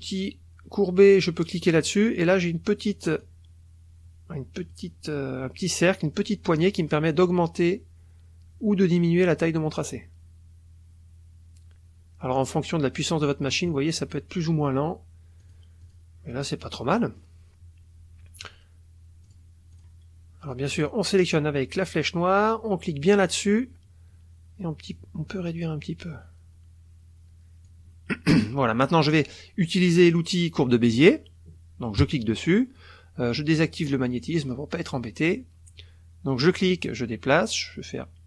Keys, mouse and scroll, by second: 1.5 click, 1.8-3.2 middle drag, 3.2-4.9 drag, 7.2-13.6 drag, 15.4 click, 15.8 click, 16.6 click, 16.7 right click, 19.2 click, 19.7 click, 20.7 click, 21.3 click, 23.1 click, 24.9-27.9 drag, 29.1 click, 32.1 click, 34.0 click, 36.5 click.